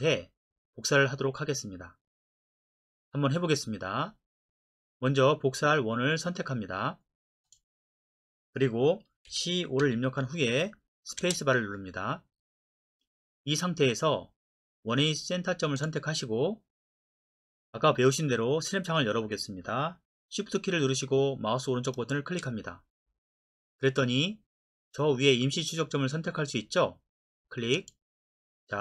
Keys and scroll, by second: 9.3-9.9 typing, 11.2 space.